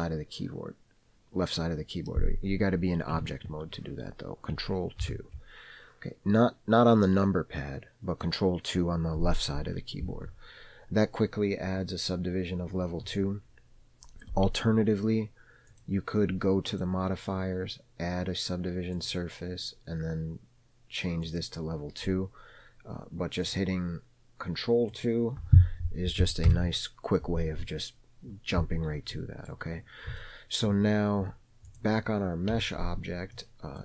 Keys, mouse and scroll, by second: 3.5 Tab, 5.4 ctrl+2, 16.0 click, 17.0 click, 19.4-21.1 drag, 21.6 click, 23.8 click, 25.2 click, 26.8 ctrl+2, 29.4-29.8 middle drag, 29.8-30.4 scroll down 2, 30.5-31.0 shift+middle drag, 31.1-32.1 scroll down 3, 32.0 click, 32.8 KP_Decimal, 33.6-33.8 middle drag.